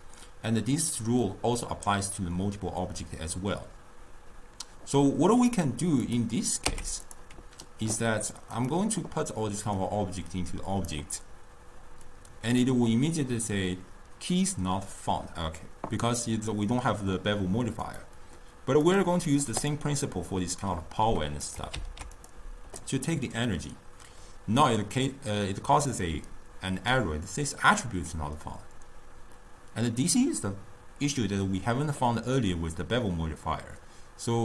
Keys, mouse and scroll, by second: 5.4 click, 6.1 click, 6.7 x, 8.6 click, 9.8 drag, 12.1 click, 17.9 click, 18.9-21.5 right drag, 21.5-22.7 drag.